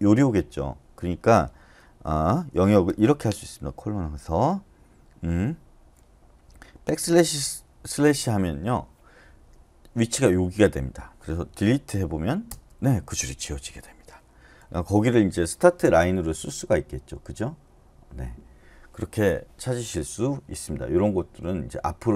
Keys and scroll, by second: 2.9 typing, 6.7-7.4 typing, 11.5-12.2 typing, 12.5 Return, 14.3-15.1 typing.